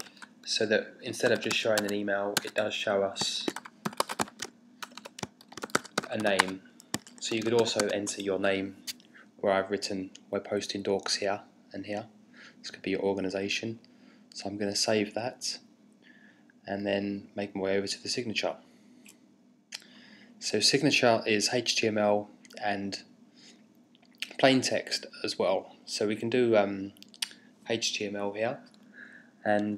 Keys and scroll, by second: 0.0-2.0 typing, 2.4 Tab, 3.2-8.3 typing.